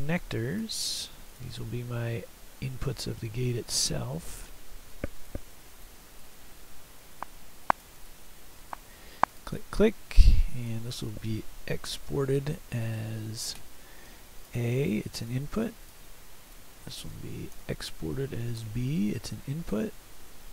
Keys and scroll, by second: 11.2 Escape, 12.1 ctrl+e, 14.1 a, 17.6 ctrl+e, 18.6 b.